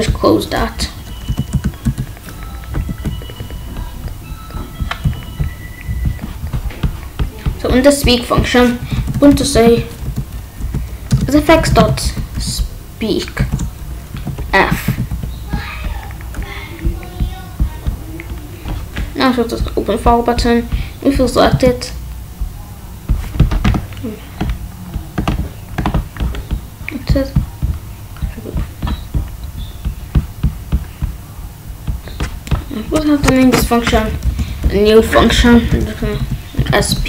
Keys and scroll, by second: 0.7 Down, 1.2 BackSpace, 1.4 Return, 1.8 BackSpace, 2.8 ctrl+s, 8.8-12.0 typing, 13.3 shift+9, 14.1 f, 14.8 ctrl+s, 21.4 Return, 33.8 Up, 33.8 Left, 34.0 Up, 34.2 Left, 34.6 Down, 35.1 Left, 36.0 BackSpace, 36.5 p.